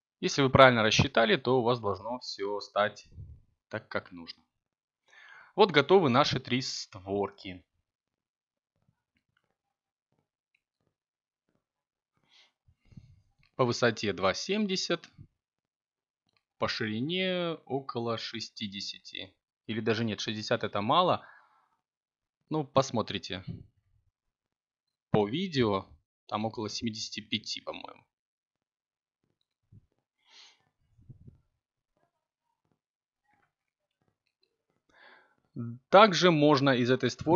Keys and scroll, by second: 17.9 7, 35.2 3.